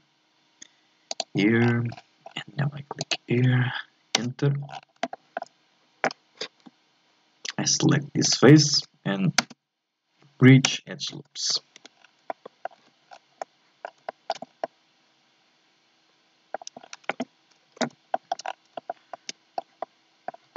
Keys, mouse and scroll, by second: 1.6-4.6 scroll down 13, 4.6 scroll down 1, 4.7 scroll up 7, 5.1-6.6 shift+middle drag, 6.6 z, 8.2 shift+right click, 9.4 space, 11.3 scroll down 1, 11.8 Tab, 12.0 scroll down 1, 12.3 middle click, 12.8 z, 13.1-13.4 scroll down 1, 13.4 middle click, 14.0-14.6 shift+scroll up 4, 14.1 shift+middle click, 14.6-16.8 middle drag, 16.8-17.6 scroll up 3, 17.6-18.1 scroll up 1, 18.1 shift+middle click, 18.5 scroll up 2, 18.7-20.5 shift+middle drag.